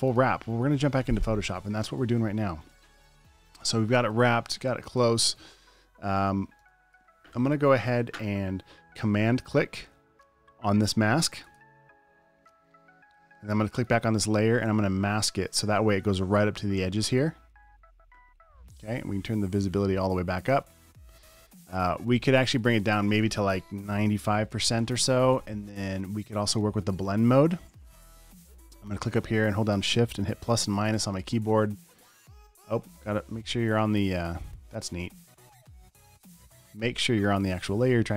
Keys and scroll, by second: 3.3 alt+super+space, 4.0 space, 4.9 super+space, 5.4 space, 7.1 space, 21.6 v, 24.2-25.1 typing, 27.0 v, 35.2 super+a, 36.0 BackSpace, 36.5 Escape.